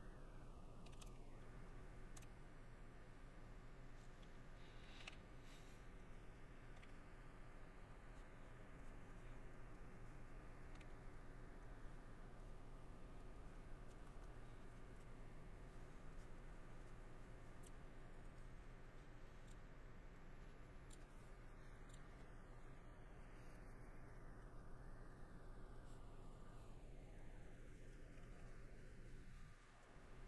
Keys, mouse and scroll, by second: 4.1 middle click, 6.1 middle click, 10.0 middle click, 14.1 shift+middle click, 17.4 middle click, 25.8 middle click, 27.5 middle click, 28.3 middle click.